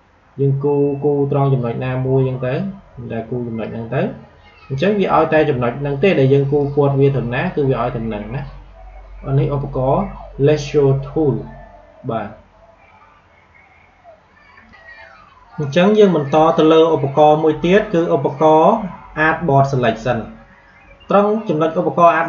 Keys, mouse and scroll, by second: 5.3 a, 6.5-9.8 drag, 14.6 click.